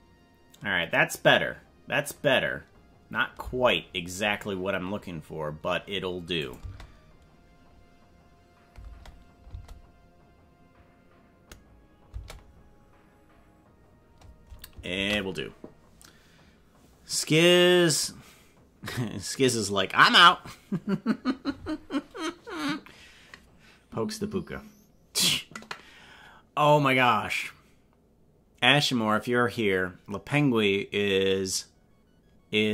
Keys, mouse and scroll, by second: 3.5 space, 6.4 click, 8.9 space, 9.6 space, 12.3 space, 15.0 ctrl+s.